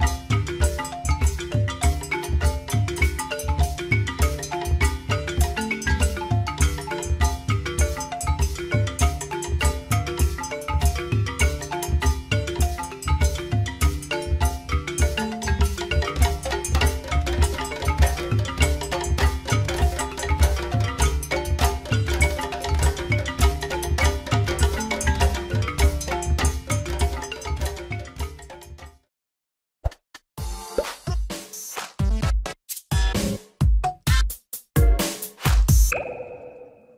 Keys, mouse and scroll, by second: 0.4 Tab, 5.6 click, 7.9 shift+click, 9.6 g, 15.1 Tab, 16.1 click, 17.5 click.